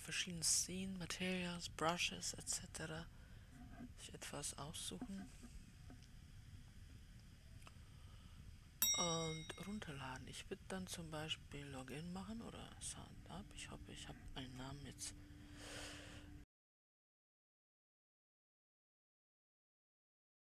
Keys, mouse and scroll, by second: 10.1-20.5 drag.